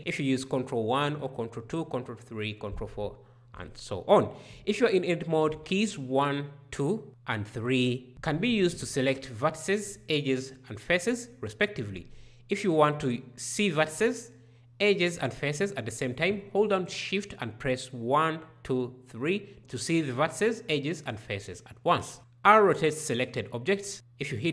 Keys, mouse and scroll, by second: 5.3 1, 12.2 shift+1, 21.9 r.